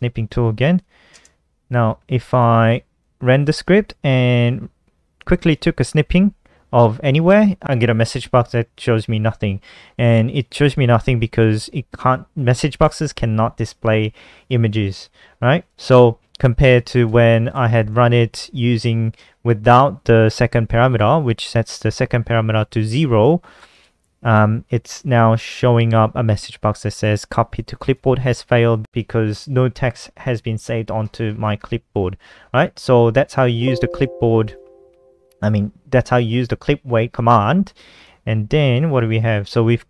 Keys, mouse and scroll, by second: 0.7 click, 2.3 click, 3.6 F5, 4.3 click, 4.9-5.7 typing, 10.0 click, 11.1 click, 15.3 click, 16.4 click, 16.9 BackSpace, 17.1 BackSpace, 17.2 BackSpace, 17.5 ctrl+s, 18.8 F5, 19.6 click, 22.6 click, 23.2 click, 25.2 click, 26.4 click, 27.2 click, 32.6 click, 33.5 click, 34.6 click, 37.5-38.1 scroll down 2, 38.1 click, 38.3-39.2 scroll down 4, 39.2-39.8 scroll down 2.